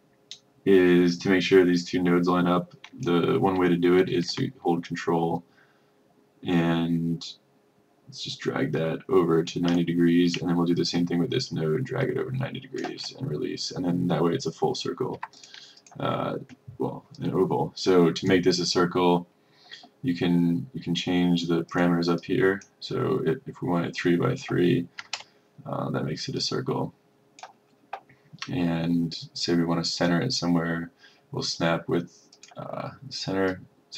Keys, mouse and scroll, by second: 4.9 ctrl+click, 10.9 ctrl+click, 15.3 F1, 15.5-19.2 drag, 22.3-25.1 drag, 25.1 KP_3, 26.5 click, 32.5-33.9 drag.